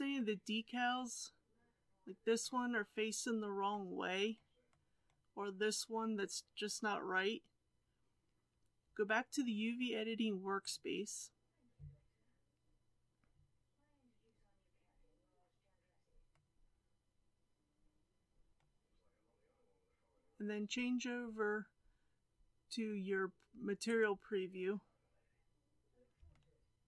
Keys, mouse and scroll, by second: 10.6-11.7 drag, 23.8 click, 24.9-26.3 scroll up 4, 26.3-26.8 shift+middle drag.